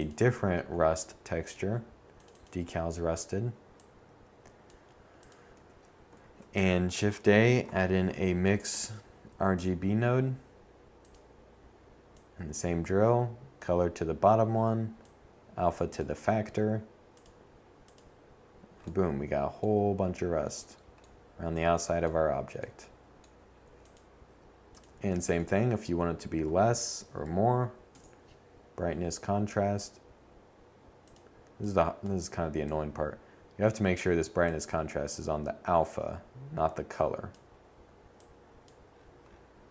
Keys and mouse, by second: 3.2 a, 3.8 shift+a, 6.9 Down, 8.7-10.3 drag, 14.5 click, 21.4-22.5 drag, 22.5 shift+a, 25.2 Down.